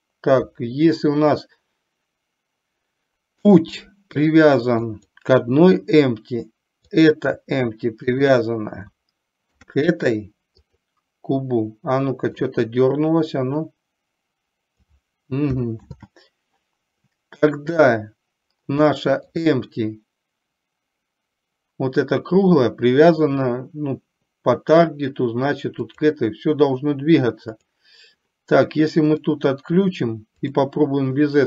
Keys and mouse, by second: 4.8 click, 6.9 click, 8.2 shift+click, 9.4 ctrl+p, 12.4 click, 13.8-15.1 drag, 16.1 ctrl+z, 17.8 click, 18.9-19.3 shift+middle drag, 25.9 click, 27.7 click, 30.4 click.